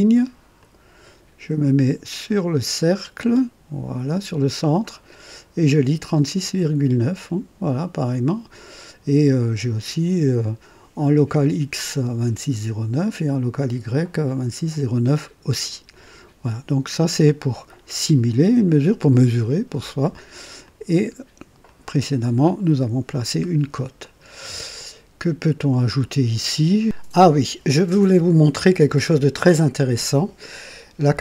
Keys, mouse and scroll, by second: 0.5 click, 20.6 click, 21.6 click, 23.4 scroll down 2, 24.0-26.8 drag, 28.0-30.1 drag.